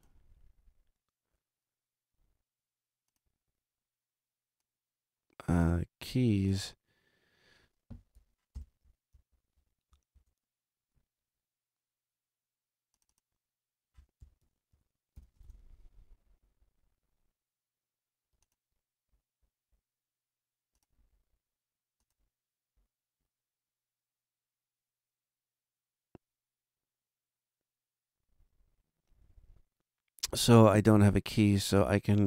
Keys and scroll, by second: 8.5 shift+super+n, 9.3 shift+super+Right, 9.5 super+Down, 10.1 super+Return, 10.9 Return, 13.9-15.6 typing.